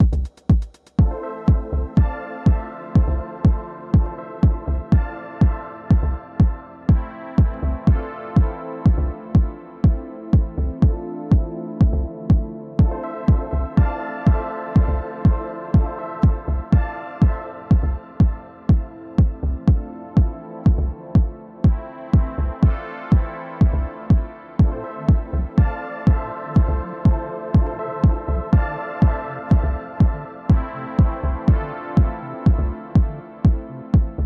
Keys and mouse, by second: 6.8-7.8 alt+drag, 11.0 F4, 15.2 click, 19.4 click, 33.5 click, 34.0 click.